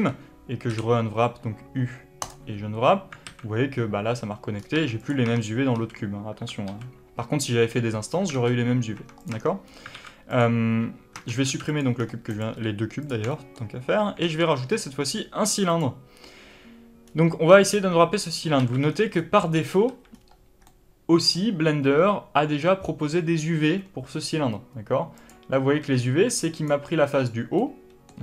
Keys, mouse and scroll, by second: 3.1 alt+a, 4.5 scroll down 1, 4.6 Tab, 5.0 click, 5.1 Tab, 9.1 click, 9.2 Tab, 9.6 scroll up 1, 9.8 alt+a, 10.2 click, 11.1 Tab, 11.9-12.2 scroll down 2, 12.2 click, 12.4 x, 13.2 shift+middle click, 14.1 shift+a, 17.0 scroll up 2, 17.2 Tab, 18.5 alt+a, 18.7-19.1 scroll down 2, 19.1 middle click, 19.8-25.1 middle drag, 19.8 a, 20.0-20.6 scroll up 2, 25.1 click, 25.9 3, 26.4 click, 27.5-28.2 middle drag.